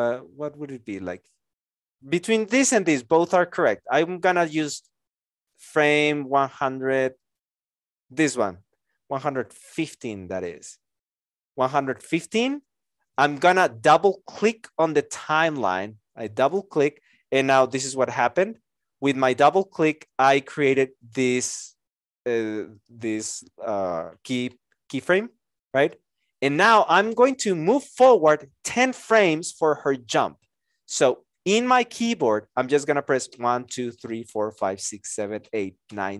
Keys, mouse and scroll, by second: 33.3 Right.